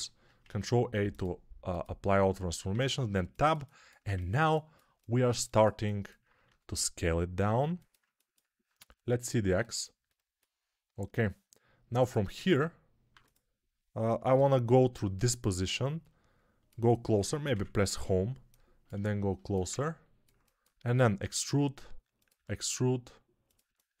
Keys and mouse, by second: 2.2-24.0 middle drag, 2.6 Tab, 6.3 s, 13.0 2, 14.2 ctrl+KP_3, 17.4 Home, 21.1 e, 22.2 e.